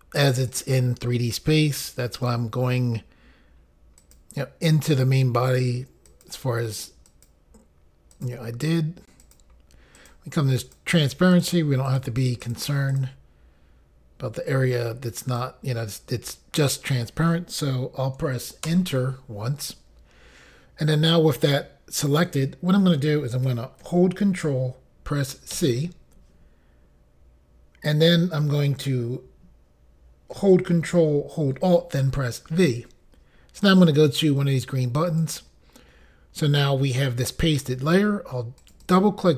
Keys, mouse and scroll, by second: 0.5 click, 2.1 click, 4.0 click, 6.1 click, 7.1 click, 8.1 click, 9.2 click, 9.9 click, 10.6 click, 11.3 click, 11.8 click, 12.4 click, 12.9 click, 15.2 click, 18.6 Return, 25.5 ctrl+c, 32.5 ctrl+alt+v, 35.1 click, 38.6 click, 38.8 click.